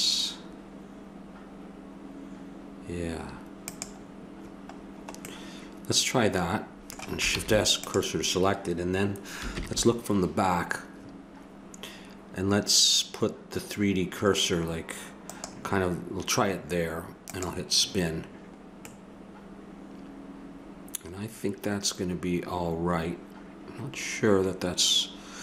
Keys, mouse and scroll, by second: 4.7-6.0 middle drag, 7.4 shift+s, 15.3-17.0 right drag, 17.3-18.8 drag, 18.8-20.8 middle drag, 21.2 middle click.